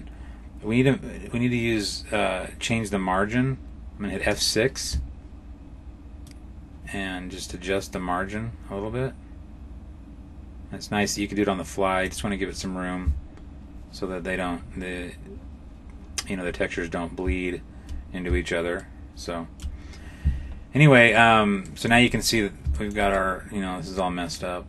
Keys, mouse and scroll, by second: 4.0 F6, 14.2-16.0 scroll up 4, 16.0-16.3 scroll down 1, 16.3-17.7 scroll down 5, 18.7 shift+middle click, 21.5 middle click, 21.9-22.6 scroll up 7, 22.6 shift+middle click, 23.0 middle click.